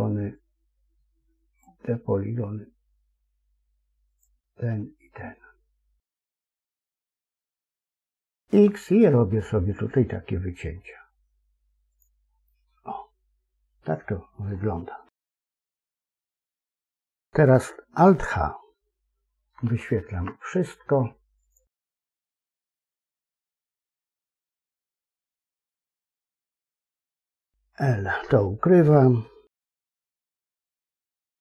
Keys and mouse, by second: 8.4 x, 12.3-14.4 middle drag, 15.0 KP_3, 19.5 alt+h, 26.8 l, 30.8 h.